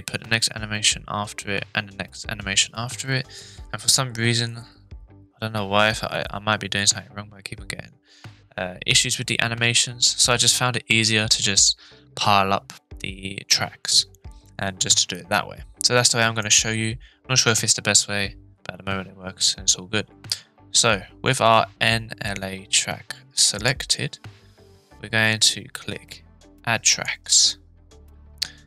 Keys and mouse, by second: 16.4-21.3 drag, 23.5-27.0 drag.